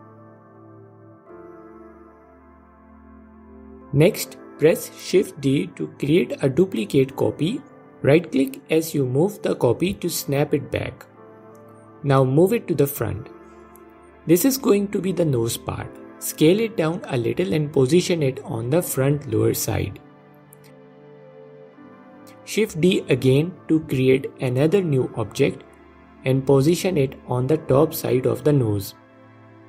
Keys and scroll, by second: 6.6 shift+d, 9.9 s, 15.3 s, 23.2 shift+d, 25.8 s.